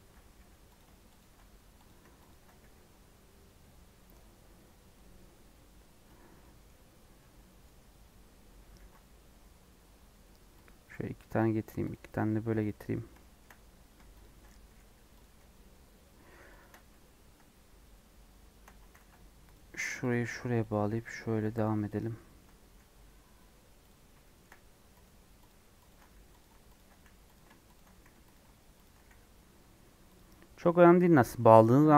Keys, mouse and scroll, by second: 0.3 j, 0.7 click, 2.5 j, 3.1-3.6 scroll down 2, 6.3-7.6 middle drag, 7.6-8.2 scroll down 3, 8.2 scroll up 1, 8.7 ctrl+r, 11.2 ctrl+r, 12.6 click, 12.7-13.0 scroll up 1, 13.1 shift+middle click, 13.5 scroll up 1, 14.1 shift+click, 14.6 j, 15.1 click, 16.8 j, 18.9 ctrl+z, 19.5 click, 20.2 j, 20.6 click, 21.2 j, 21.6 click, 22.6 j, 23.8 click, 24.2 shift+middle click, 25.0 click, 25.4 click, 25.8 shift+click, 26.0 j, 26.3 click, 26.9 j, 27.3 click, 27.9 j, 28.3 click, 29.0 j, 29.5 scroll down 2, 30.1 click.